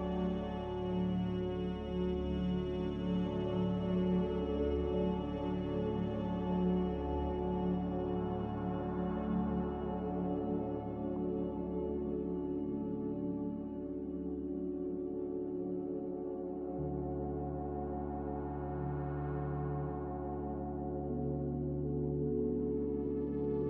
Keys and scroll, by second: 1.0 z, 4.4 typing, 6.5-8.1 typing, 12.2 z, 14.7 typing, 15.1 Return, 18.4 m, 21.5 z.